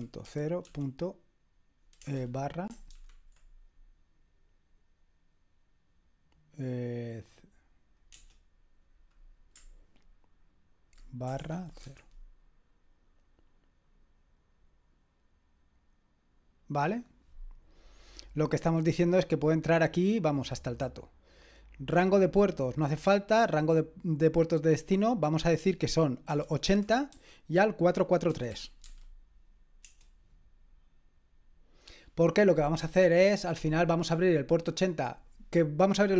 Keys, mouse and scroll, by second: 0.0-2.9 typing, 8.1 BackSpace, 11.6-12.4 typing, 22.0 click, 24.5 click, 26.1-29.8 typing.